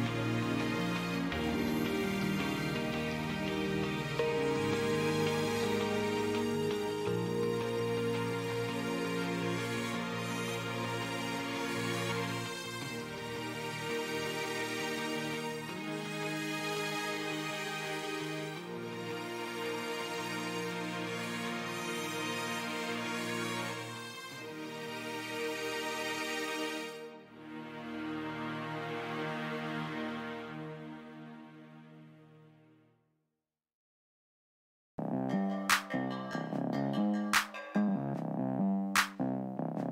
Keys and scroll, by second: 5.3 z, 7.4 ctrl+z, 11.5 ctrl+z, 21.0 ctrl+z, 21.9 ctrl+z, 31.2 shift+s, 32.0 s, 35.5 s, 37.9 shift+s, 38.7 shift+s.